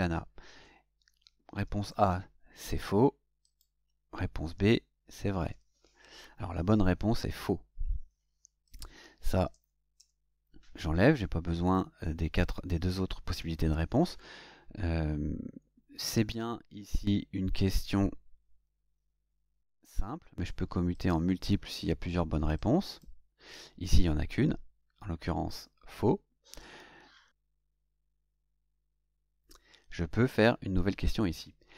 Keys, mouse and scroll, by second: 1.2-2.6 typing, 3.4 click, 4.5-6.0 typing, 8.6 click, 9.5 BackSpace, 20.9 click, 22.5 click.